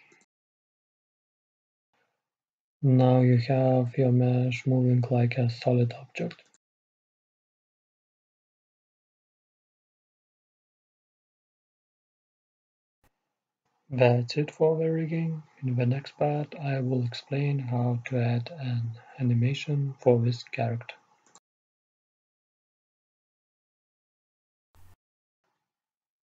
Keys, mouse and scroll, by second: 2.7-6.5 middle drag, 6.5-8.0 right drag, 7.8 click, 8.6-9.7 drag, 11.6-13.4 drag, 17.2-19.0 drag, 19.6-22.1 middle drag, 21.4-23.9 right drag, 24.1-26.2 drag, 24.8 right click.